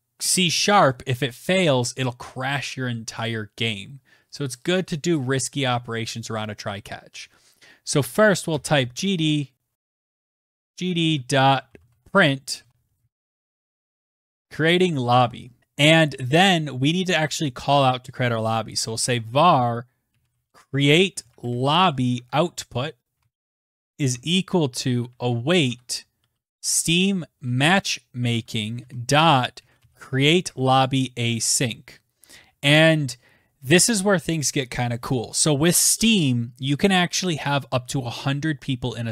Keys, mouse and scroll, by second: 7.4-13.6 typing, 14.9 click, 15.2-15.9 typing, 17.4-30.6 typing, 27.2 Tab.